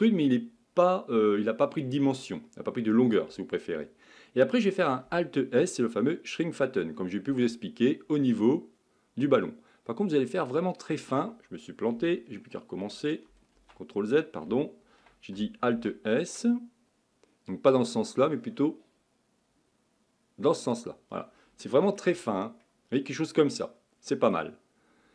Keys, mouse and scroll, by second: 7.3 alt+s, 13.6 ctrl+z, 15.7 alt+s, 21.6 middle click, 22.1 Tab, 22.6-25.1 middle drag.